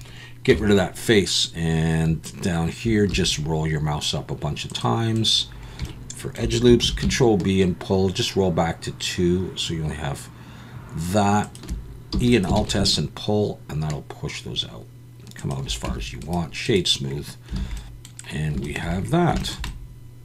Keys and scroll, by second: 0.5 KP_1, 1.5 alt+a, 1.5 KP_1, 3.1 ctrl+r, 6.8 ctrl+b, 12.1 e, 12.6 alt+s, 15.9 Tab, 17.6 alt+a.